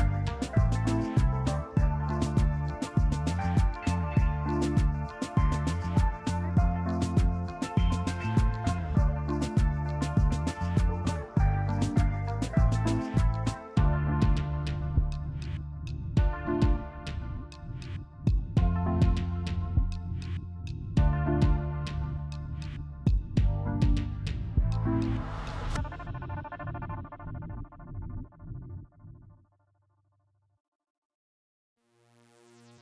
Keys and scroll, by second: 0.2 Delete, 0.8 f, 1.7 f, 2.3 F3, 3.8 ctrl+z, 5.4 F3, 7.6 f, 8.1 F3, 9.0 F3, 10.6 f, 11.1 F3, 13.8 a, 14.2 ctrl+z, 15.9 c, 18.2 b, 19.1 b, 20.7 Delete, 22.6 f, 27.1 ctrl+z, 27.3 f, 28.5 2, 28.8 Tab, 28.8 Return, 30.1 Tab, 30.6 2, 31.4 a.